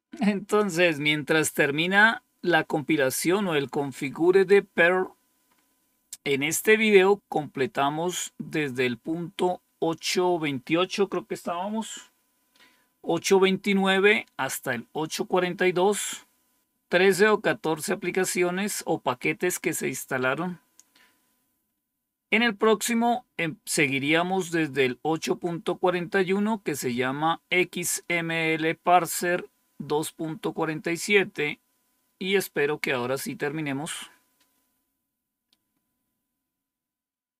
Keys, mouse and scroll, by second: 5.4-6.2 scroll up 2, 6.2-6.9 scroll up 1.